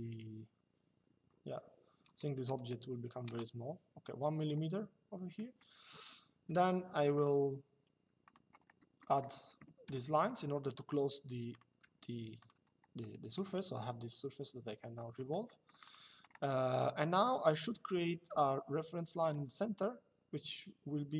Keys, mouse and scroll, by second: 3.0 KP_Enter, 5.0 middle click, 6.9 click, 8.7 middle click, 9.6 l, 10.3 click, 11.5 Escape, 12.1 click, 12.7 middle click, 14.8 Escape, 17.6 middle click, 18.0 l, 18.9 click.